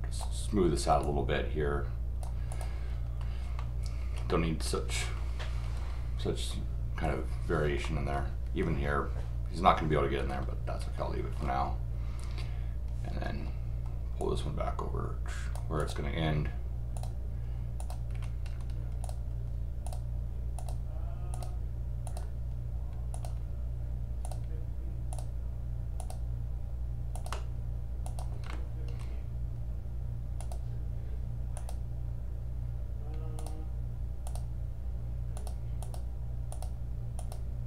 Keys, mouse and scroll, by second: 1.0-2.2 drag, 2.5 click, 3.5 scroll up 1, 3.6 middle click, 5.2 scroll up 1, 5.7 scroll up 2, 7.8 middle click, 10.8 scroll up 2, 11.3 scroll up 2, 13.3 scroll down 2, 14.2-15.5 drag, 15.8 click, 16.9 click, 17.8 click, 18.4 middle click, 18.4 scroll down 2, 19.0 click, 19.8 click, 20.6 click, 21.3 click, 22.0 click, 23.1 click, 24.2 click, 25.1 click, 26.0 click, 27.1 click, 28.0 click, 28.5 middle click, 30.4 click, 31.5 click, 33.4 click, 34.2 click, 35.3 click, 35.8 click, 36.5 click, 37.2 click.